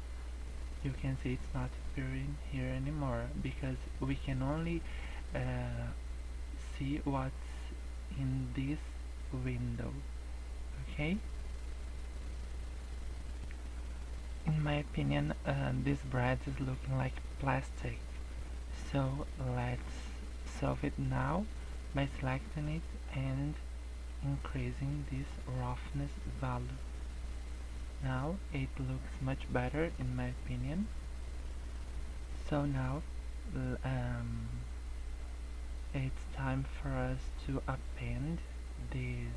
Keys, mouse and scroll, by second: 0.4 scroll up 1, 3.4-3.8 scroll up 2, 3.8 scroll down 2, 10.8 scroll up 1, 11.7 scroll up 2, 12.0 scroll down 5, 12.5 scroll up 1, 13.1 scroll up 1, 13.4 scroll down 1, 14.8 scroll up 2, 15.3 scroll down 1, 17.5 scroll up 1, 18.1 scroll down 3, 18.4-19.3 scroll up 2, 19.3 scroll up 2, 20.4 scroll down 2, 20.7 scroll up 1, 22.6 middle click, 23.1-23.5 scroll up 2, 24.0 click, 25.8 scroll up 1, 28.6-29.6 scroll down 3, 30.3-30.7 scroll up 2, 30.9 scroll down 1, 38.9-39.3 scroll down 8.